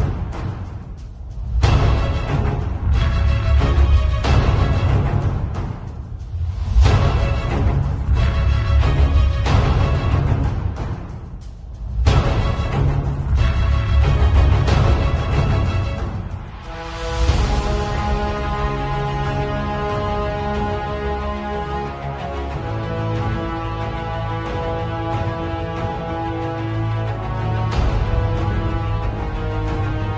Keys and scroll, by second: 0.4 ], 1.6-4.5 typing, 6.7 x, 7.3 ], 8.3 ], 10.0 [, 10.5 [, 13.0 [, 13.8 [, 14.9 x, 15.8 x, 17.4 x, 19.6-22.4 typing, 24.8-27.8 typing.